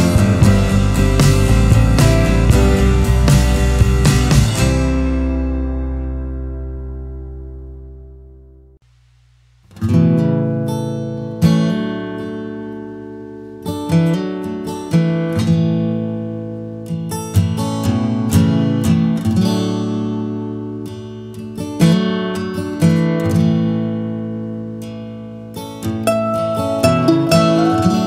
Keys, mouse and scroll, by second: 4.5 scroll, 9.3 Delete, 11.0 Delete, 12.0 b, 22.5 b.